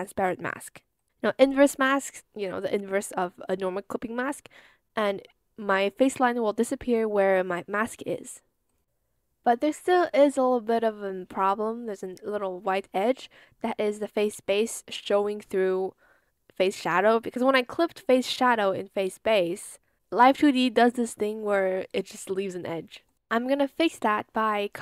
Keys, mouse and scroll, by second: 1.9 Return, 9.7 ctrl+z, 21.7 ctrl+z.